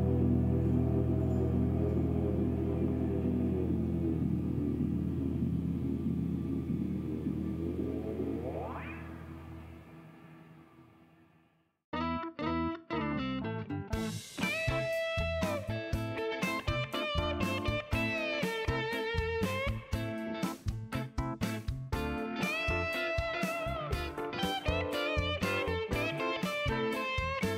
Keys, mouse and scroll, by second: 0.3 middle click, 0.8 middle click, 2.7 click, 4.3 click, 7.1 click, 7.8 middle click, 9.3 click, 13.0 click, 13.7 right click, 14.0 scroll down 2, 14.2 middle click, 15.9 click, 16.8 middle click, 17.3 shift+right click, 17.8 shift+scroll up 2, 18.8 shift+right click, 20.0 shift+middle click, 20.3 shift+right click, 21.2 shift+right click, 21.3 click, 23.4 shift+right click, 23.9 shift+middle click, 25.0 click, 25.5 click, 26.2 shift+right click, 27.1 shift+right click.